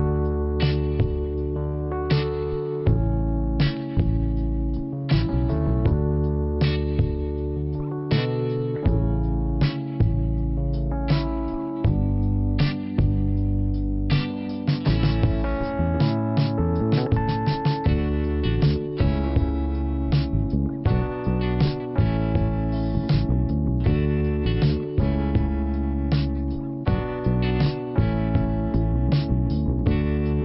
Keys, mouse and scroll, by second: 1.9 click, 3.4 click, 6.5 middle click, 12.7 click, 12.8 click, 13.7 click, 13.8 click, 16.7 scroll up 2, 17.7 click, 18.4 click, 18.4 click, 19.4 click, 21.4 scroll up 2, 22.4 click, 24.2 click, 26.7 click.